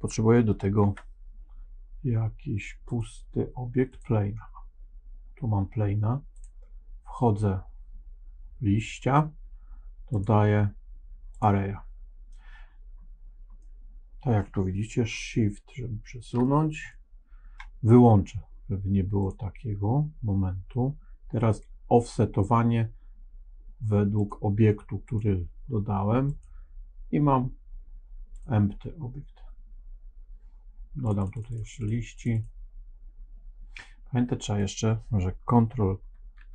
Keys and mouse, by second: 0.7 shift+a, 8.7 click, 10.1-11.3 drag, 13.5 middle click, 15.1-16.4 shift+middle drag, 16.8 middle click, 19.1 click, 24.1 click, 25.0 click, 26.3-28.4 drag, 31.0 click, 31.1 click, 31.3 click, 31.4 click, 31.6 click, 31.7 click, 32.1 click, 32.2 click, 34.5 click, 36.3 ctrl+a.